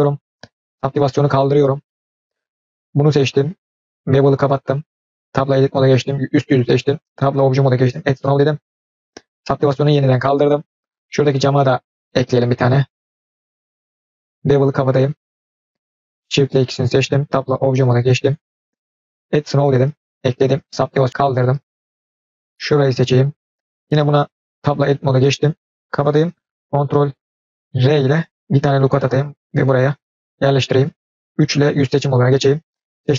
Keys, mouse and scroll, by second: 0.9 click, 1.4-2.1 scroll down 3, 1.8-2.3 middle drag, 2.8 click, 4.0 click, 5.3 Tab, 5.8 click, 7.3 Tab, 7.9 drag, 9.6 click, 10.1-10.9 middle drag, 11.1-12.0 scroll up 2, 12.0 click, 12.4 Tab, 13.5 shift+click, 15.1 click, 16.0 shift+click, 17.2 Tab, 19.1 click, 20.9 click, 21.6-22.4 middle drag, 22.6 click, 24.5 Tab, 25.8 click, 27.7 ctrl+r, 30.7 click, 31.5 3, 31.7 click, 33.0 Tab.